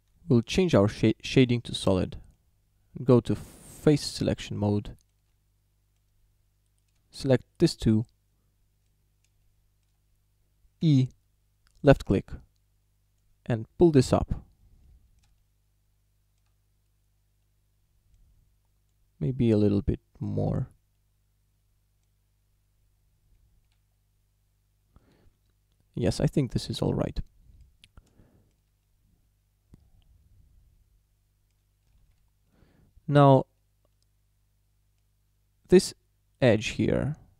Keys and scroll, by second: 0.3 z, 10.9 e, 23.4 Tab, 25.3 Tab, 32.1 shift+d.